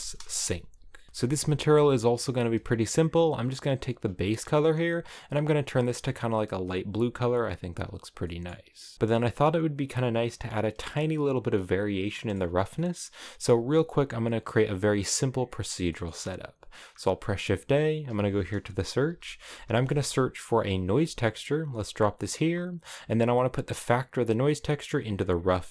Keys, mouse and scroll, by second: 0.7 a, 1.1 click, 1.7 scroll up 1, 4.9 click, 8.9 a, 9.6-20.3 drag, 25.4 click.